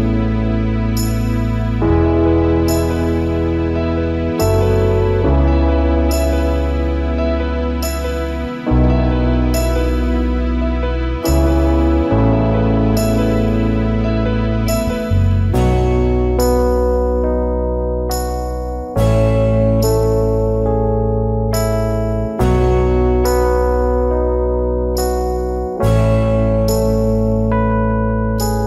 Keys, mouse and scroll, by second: 0.2 alt+scroll down 1, 0.3 space, 0.6 alt+scroll up 1, 1.5 space, 5.2 space, 12.9 shift+click, 14.8 space, 18.7 alt+scroll down 1, 18.8 space, 19.3 alt+scroll up 1, 21.0-21.9 alt+scroll up 1.